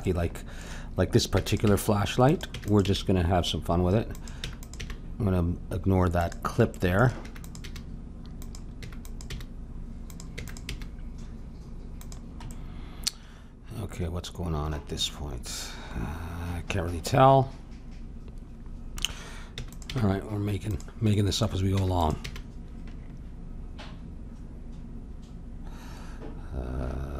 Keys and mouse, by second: 0.0-2.2 middle drag, 1.3 e, 1.6 g, 2.5 e, 2.8 g, 4.4 e, 4.8 g, 7.2 e, 7.6 g, 8.8 e, 9.2 g, 10.3 e, 10.7 g, 14.4-16.7 middle drag, 19.5 e, 19.8 g, 21.1-23.0 drag, 21.7 e, 22.2 g.